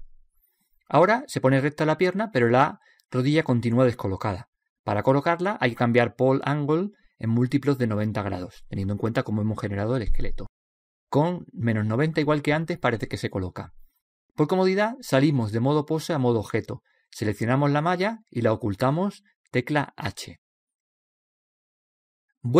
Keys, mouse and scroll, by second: 1.1 scroll down 1, 1.2-2.3 middle drag, 2.3-3.0 scroll up 1, 6.1-8.0 drag, 11.2-13.1 middle drag, 13.7-14.4 scroll down 1, 14.4-16.2 middle drag, 16.2-16.6 scroll down 1, 16.6-18.5 drag, 18.7-20.5 right drag, 20.3 h, 22.0-22.5 right drag.